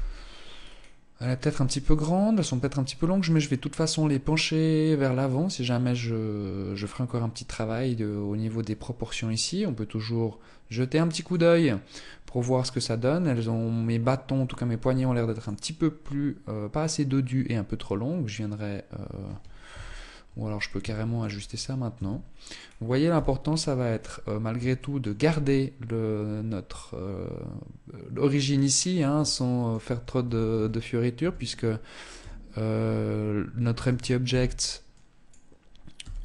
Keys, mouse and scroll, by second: 0.7-1.9 scroll up 1, 2.9-3.6 scroll up 1, 18.9 KP_1, 20.3 shift+middle click, 20.6-21.4 scroll up 3, 21.4 Tab, 21.9-22.4 scroll up 1, 22.4 z, 22.6-23.7 scroll up 5, 23.7 shift+middle click, 27.6 scroll down 4, 28.2 shift+middle click, 29.1 a, 29.8 a, 30.4 a, 31.4 t, 33.1 t, 33.6 b, 35.2 g.